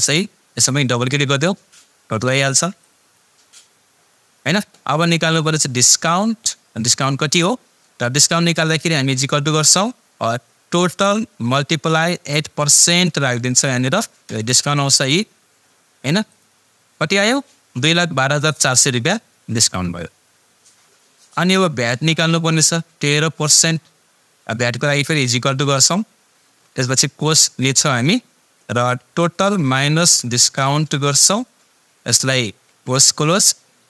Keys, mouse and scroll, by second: 0.9-3.4 drag, 9.3 =, 10.9 click, 10.9 click, 13.2 shift+5, 16.3 click, 22.5 click, 25.4 =, 27.5 shift+9, 29.2 click, 32.7 shift+0.